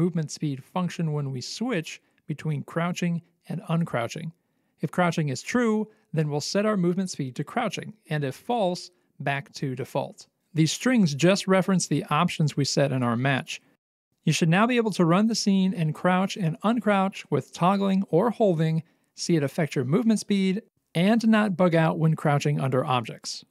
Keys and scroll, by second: 0.0-0.4 typing, 1.8 Return, 2.3-6.2 typing, 7.5 t, 17.5 w, 19.5 c, 22.6 c.